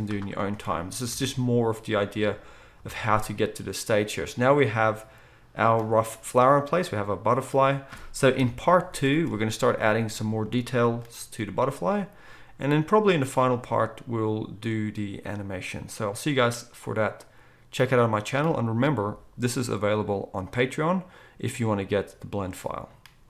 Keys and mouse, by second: 0.5 Tab, 1.1 alt+a, 2.8 z, 8.4 KP_1, 9.0 ctrl+s.